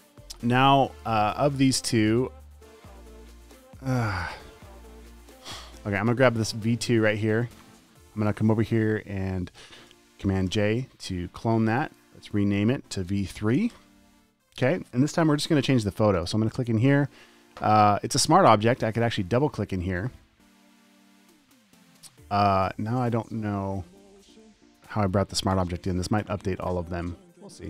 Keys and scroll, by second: 0.3 alt+super+space, 10.9 super+j, 13.3 v, 14.0 3, 14.0 Return, 21.7 v.